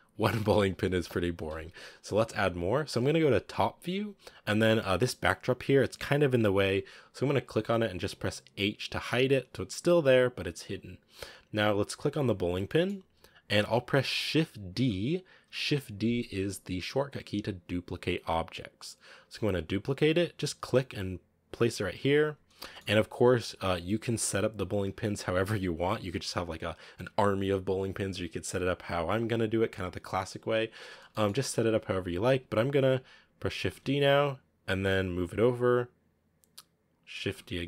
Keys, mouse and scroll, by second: 1.0 KP_7, 1.8-2.6 scroll down 3, 2.6-4.2 scroll down 2, 6.7 scroll up 2, 7.4 right click, 8.8 h, 10.5-11.2 scroll up 7, 12.1 right click, 12.4 scroll down 2, 12.6-14.7 shift+middle drag, 14.7 shift+d, 22.1-22.5 scroll down 2, 22.5-30.4 shift+middle drag, 30.4-31.6 scroll up 2, 31.0 shift+middle click, 33.5 shift+d, 37.1 shift+d.